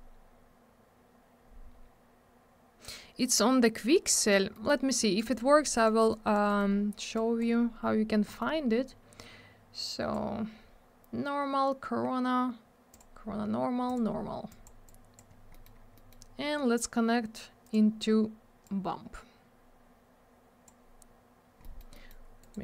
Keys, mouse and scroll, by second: 4.5 middle click, 4.6 middle click, 5.1 click, 5.2 click, 5.3 click, 5.3 double click, 5.6 click, 5.7 click, 5.7 click, 5.8 double click, 6.1 click, 6.4 middle click, 6.5 middle click, 6.7 scroll down 1, 7.1 click, 7.5-8.2 scroll up 1, 8.3 middle click, 8.3 middle click, 8.5 scroll up 1, 9.8 click, 12.9 click, 13.0 click, 13.8 click, 13.9 click, 14.5 click, 14.6 click, 14.8 click, 15.5 middle click, 15.6 middle click, 15.7 scroll down 1, 15.9 middle click, 16.1 double middle click, 16.3-16.9 scroll up 1, 17.6 click, 17.7 click, 18.6 click, 21.6 middle click, 21.7 middle click, 21.9 scroll down 1, 22.0 double middle click, 22.4 right click, 22.5 right click.